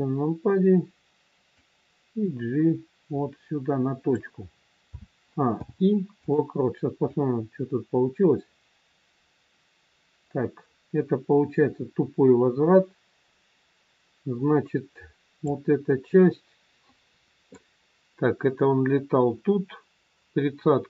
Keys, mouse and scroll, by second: 1.6 click, 4.8 a, 5.5 i, 7.1 click, 17.6 click.